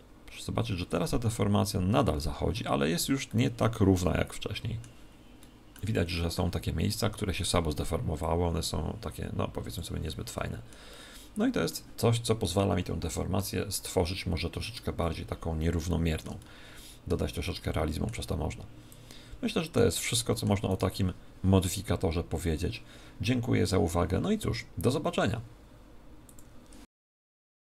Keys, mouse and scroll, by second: 3.2-4.9 middle drag, 5.3-7.6 middle drag, 8.1 click, 9.9-13.7 middle drag, 18.8 click, 20.1-21.7 middle drag, 20.6 click, 20.6 right click.